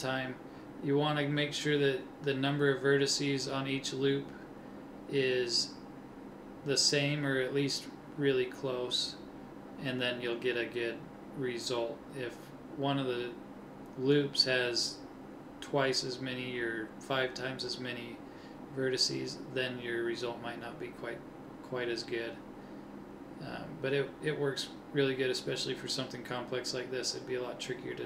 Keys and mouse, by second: 2.3-3.5 middle drag, 10.8 a, 12.9 b, 15.7 click, 18.7 b, 20.2 middle click, 23.1-25.6 middle drag, 25.6 KP_1, 27.6 click.